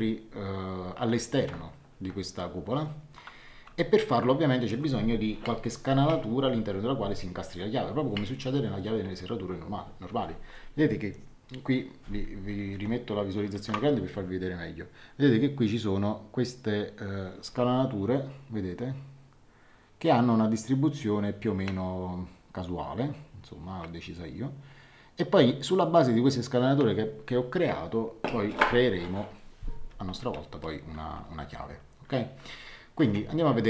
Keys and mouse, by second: 3.7 shift+middle click, 12.5 ctrl+1, 33.0 ctrl+2.